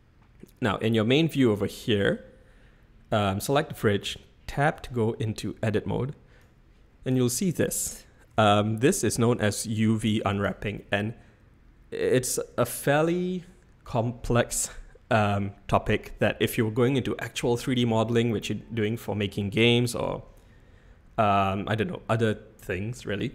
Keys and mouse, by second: 4.8 Tab, 6.4-7.1 drag, 8.3 s.